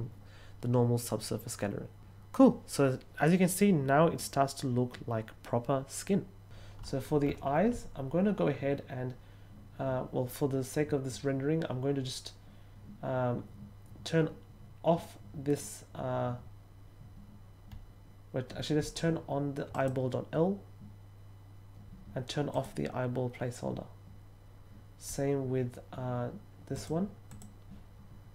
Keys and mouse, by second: 19.7 click, 22.5 click, 26.7 click, 27.2 click.